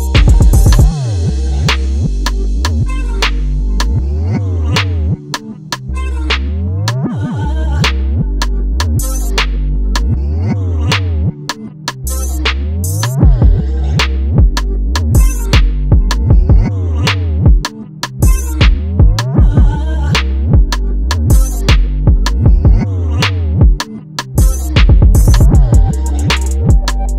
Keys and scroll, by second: 7.9 super+s, 24.1 ctrl+alt+Return.